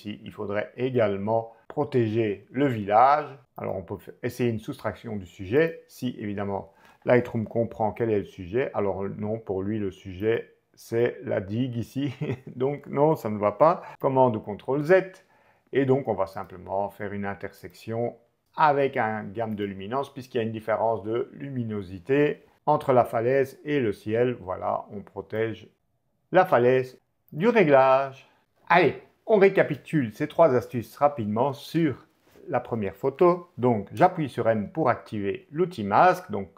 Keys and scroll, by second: 7.5 o, 13.9 super+z, 33.9 m, 36.2 shift+m.